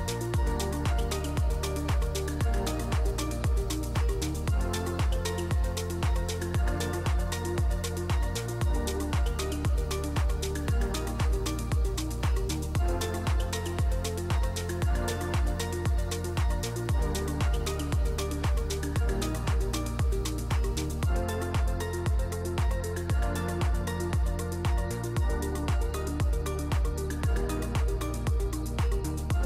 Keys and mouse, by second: 0.7 click, 1.9-2.8 drag, 4.0 middle click, 9.4 middle click, 10.6 click, 11.9-13.0 drag, 15.3 ctrl+shift+click, 16.6 click, 17.8 middle drag, 18.3-19.2 middle drag, 20.0 middle click, 20.5 middle click, 21.2 middle drag, 21.7 middle click, 22.3-24.1 drag, 26.5-27.5 drag, 29.1 middle click.